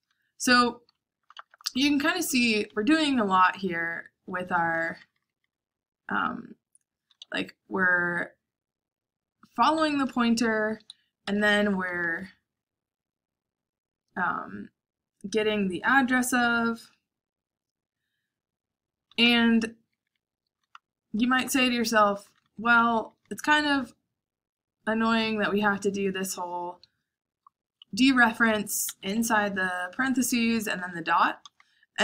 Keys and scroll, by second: 1.1-2.4 typing, 4.0-7.6 typing, 9.4-12.1 typing, 18.9-23.9 typing, 26.3 typing, 27.4-32.0 typing, 28.8 Escape.